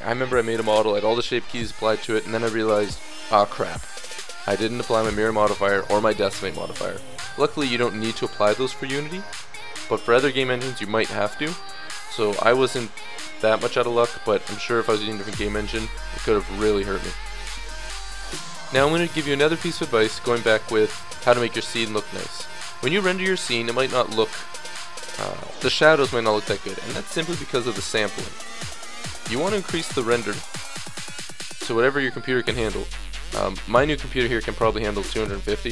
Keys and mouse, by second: 8.7-9.5 drag, 10.7-19.6 middle drag, 20.3-22.4 middle drag, 26.4-30.8 middle drag, 30.8-33.1 drag.